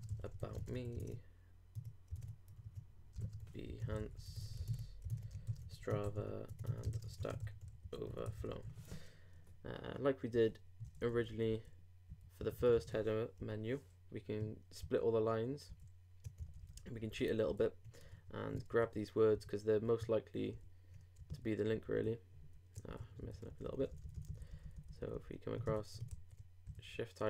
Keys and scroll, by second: 0.0-1.2 typing, 3.0-3.9 typing, 4.6 super+Tab, 5.3 shift+super+Tab, 5.5 shift+super+s, 5.6 shift+t, 6.7-7.6 typing, 10.8 shift+Right, 11.0 shift+Up, 12.1 shift+Left, 13.0 shift+super+Left, 13.4 shift+super+l, 14.8 shift+super+Right, 15.5 super+Right, 15.7 super+Left, 16.4 alt+super+Left, 16.4 alt+super+Right, 17.5 alt+Left, 18.0 alt+super+Left, 18.8 alt+shift+super+Right, 19.3 shift+super+Left, 19.8 shift+super+Right, 20.4 alt+shift+super+Right, 20.5 alt+shift+super+Left, 21.1 alt+Left, 21.3 alt+super+Right, 21.7 super+Left, 22.4 super+Right, 22.9 super+Left, 23.5 super+Right, 25.5 alt+Right, 26.1 alt+shift+super+c, 26.6 super+Left.